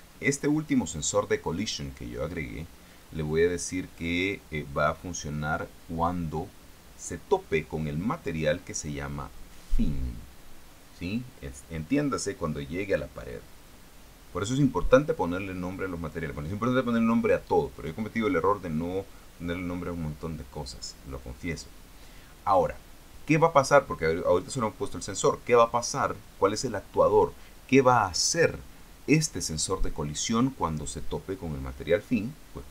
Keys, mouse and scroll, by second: 0.2 click, 14.7-16.6 drag.